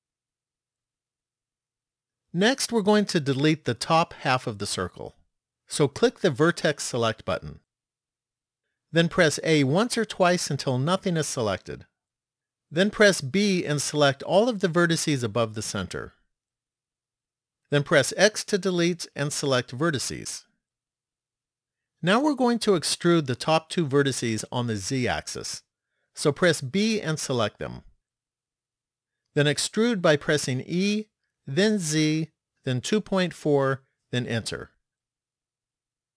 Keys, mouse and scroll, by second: 0.8 shift+middle click, 6.8 click, 9.6 a, 13.4 b, 18.6 x, 26.7 b, 30.9 e.